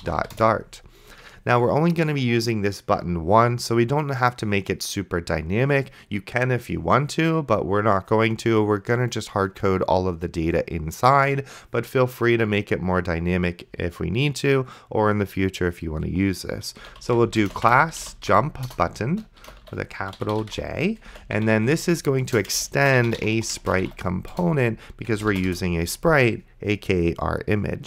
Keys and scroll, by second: 0.0-0.7 typing, 16.7-25.1 typing, 22.2 Return, 25.5 Return.